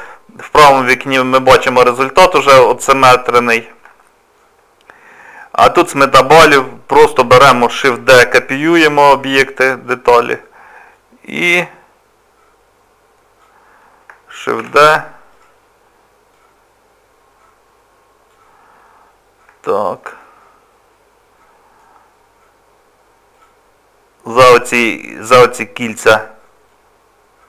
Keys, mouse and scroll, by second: 3.5-3.8 scroll down 2, 4.0 shift+middle click, 4.7 scroll up 2, 7.9 shift+d, 10.9 click, 14.6 shift+d, 16.3 click, 19.2 scroll up 1, 19.2 scroll down 2, 19.7 shift+middle click, 20.2 middle click, 23.3 click, 24.7 middle click, 26.7 click.